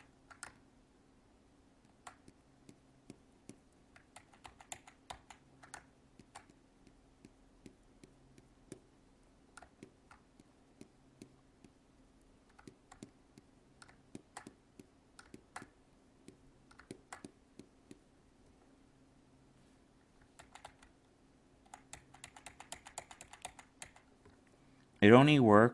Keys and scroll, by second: 4.1 ctrl+z, 20.3 ctrl+z.